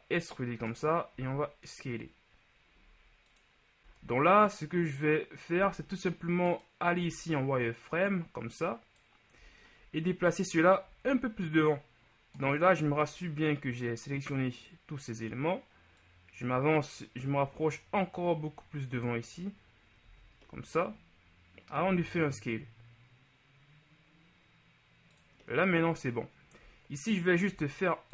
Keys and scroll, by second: 3.9 Tab, 12.9 b, 20.2 z, 21.9 s, 27.6 ctrl+r.